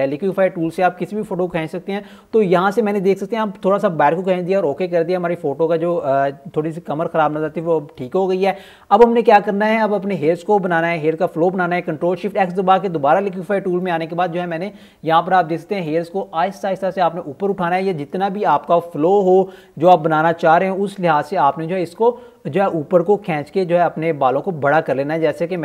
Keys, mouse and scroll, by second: 0.8-3.0 typing, 1.0 click, 2.2 click, 3.1-4.0 scroll down 1, 4.9 click, 6.4 ctrl+alt+scroll up 1, 6.6 x, 9.2 click, 11.3-13.6 scroll up 1, 14.6 click, 16.0-16.4 typing, 17.0 click, 17.6 typing, 17.9 click, 20.4-21.3 typing, 21.7 click, 22.5-23.6 typing, 22.8 click, 24.5 click, 25.3 ], 25.5 click.